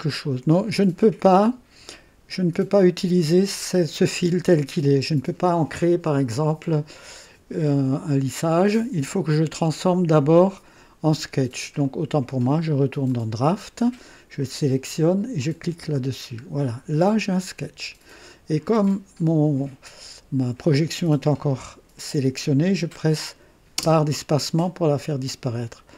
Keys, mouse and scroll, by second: 11.8 click, 13.0 click, 15.3 click, 16.4-16.7 scroll down 1, 23.7 space, 23.7 space.